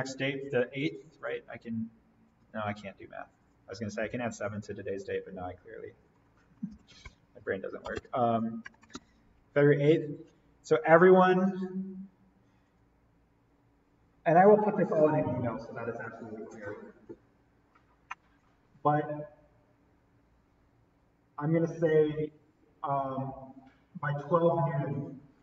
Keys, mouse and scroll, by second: 6.1 click, 6.4-8.9 typing, 10.3 click, 12.6 click.